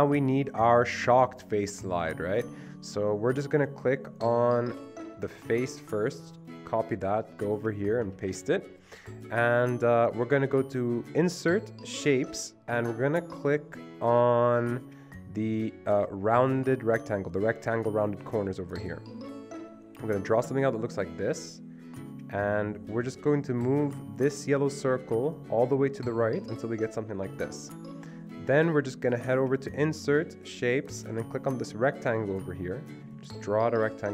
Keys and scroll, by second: 5.4 ctrl+c, 8.2 ctrl+v.